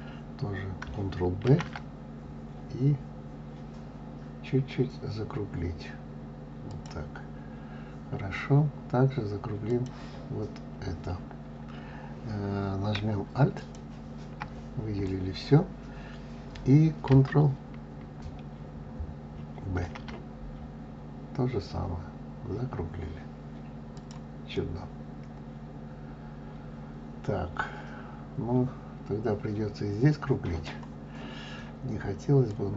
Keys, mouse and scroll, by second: 1.4 ctrl+b, 7.3-9.6 scroll up 2, 9.6 click, 13.5 alt+click, 19.7 ctrl+b, 24.4-27.5 middle drag, 32.4 click.